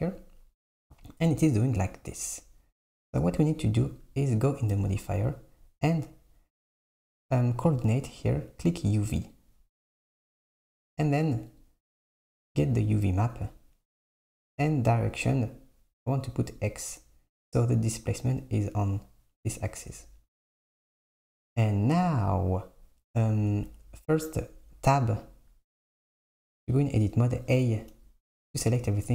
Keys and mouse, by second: 4.0 click, 7.0-10.0 drag, 11.6-17.5 drag, 24.4 Tab, 26.3 a.